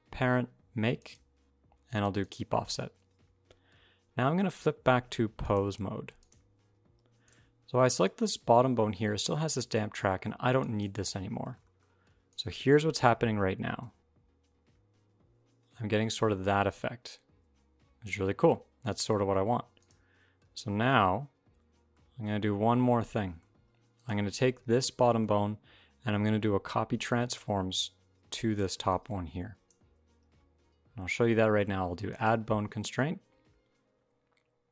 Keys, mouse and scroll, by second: 5.2 click, 7.0 click, 10.4 click, 11.1 scroll down 1, 11.2 shift+middle click, 12.1 click, 12.1 middle click, 13.3 g, 20.2 alt+r, 20.4 alt+g, 21.7 middle click, 22.2-22.9 scroll up 2, 22.9 shift+middle click, 23.7 click, 24.4-24.9 scroll up 2, 24.9 shift+middle click, 26.3 d, 26.8 d, 27.5 click, 28.4 d, 28.5 d, 28.6 d, 28.7 click, 31.9 click.